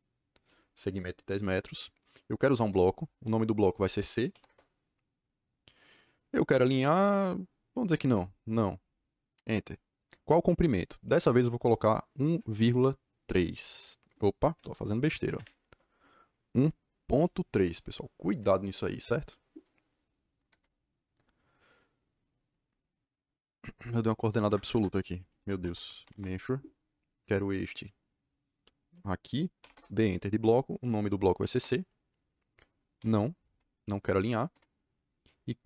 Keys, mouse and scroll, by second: 2.4 b, 4.3 c, 4.4 KP_Enter, 8.0 n, 9.3 KP_Enter, 12.2 KP_1, 12.5 KP_Decimal, 13.4 KP_3, 14.5 BackSpace, 15.3 shift+Tab, 16.5 KP_1, 17.1 ., 18.2 KP_3, 20.4 KP_Enter, 24.4 Escape, 24.6 Escape, 25.0-26.2 typing, 27.5 click, 29.5 b, 29.7 KP_Enter, 31.3 c, 31.4 KP_Enter, 32.9 n, 34.4 KP_Enter.